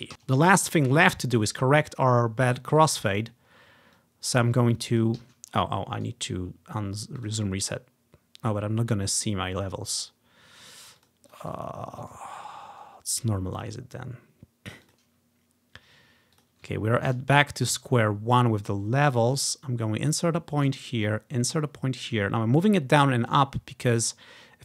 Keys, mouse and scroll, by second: 0.1 Delete, 0.5-1.1 ctrl+scroll down 1, 3.2-3.5 ctrl+scroll up 1, 4.0-5.1 drag, 5.3 ctrl+z, 6.1-7.3 right drag, 7.3 click, 11.0 click, 11.3 click, 11.5 click, 12.1 click, 13.6 click, 13.8 click, 14.9 click, 16.4 click, 16.9-17.7 scroll up 1, 17.7 click, 19.4 click, 21.1-24.6 drag.